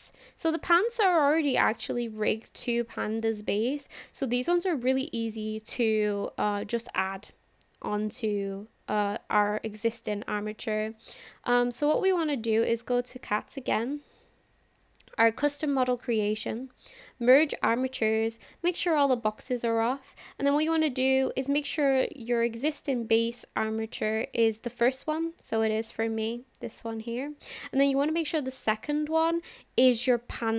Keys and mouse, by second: 1.2-1.8 middle drag, 2.3-3.3 middle drag, 6.9 click, 11.2 click, 21.9 click, 24.4 click.